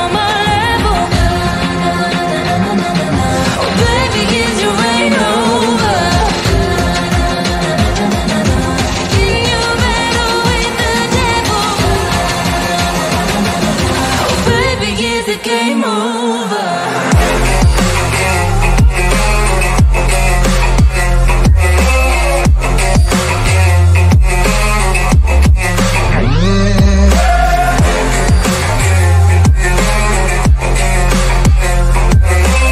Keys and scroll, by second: 4.4 shift+F2, 11.0 F3, 11.6 Escape, 11.9 Delete, 12.1 Escape, 25.2 Escape, 27.0 Delete, 28.2 Escape.